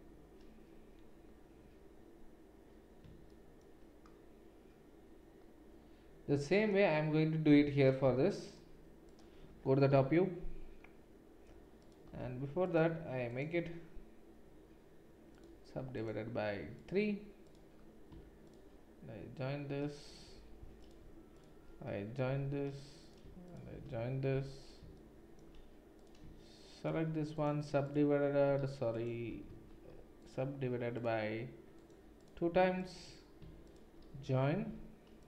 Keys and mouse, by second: 7.5 1, 9.1 click, 9.2-12.7 middle drag, 9.9 KP_7, 12.7 click, 12.9-17.6 middle drag, 13.3-29.3 right drag, 20.3 j, 20.8 click, 22.3 j, 24.3 j, 29.3 ctrl+middle click, 29.5 ctrl+z, 30.2-35.2 right drag, 33.7 shift+click, 33.7 shift+middle click, 34.6 j.